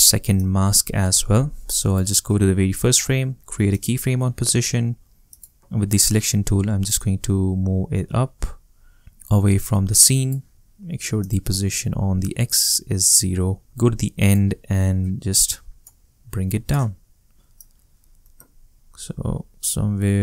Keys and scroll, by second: 12.7 shift+0.